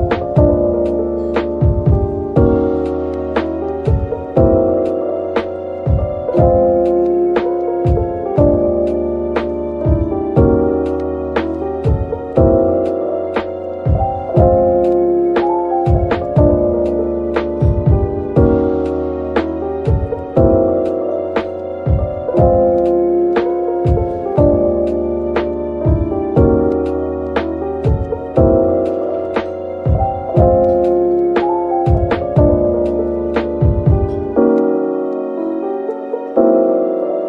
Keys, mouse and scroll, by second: 1.6 click, 2.5 ctrl+l, 3.2 middle click, 4.1-5.1 typing, 5.7 middle click, 6.4-7.3 typing, 8.9 typing, 9.9-11.4 typing, 12.6 middle click, 16.1 shift+click, 17.0 middle click, 17.7 typing, 21.1 typing, 22.7 scroll down 1, 23.1-23.9 typing, 25.8 middle click, 28.0 typing, 31.9 Tab, 32.3-32.6 scroll down 1, 32.6 middle click, 34.9 scroll up 1, 35.3 middle click, 37.1 Tab.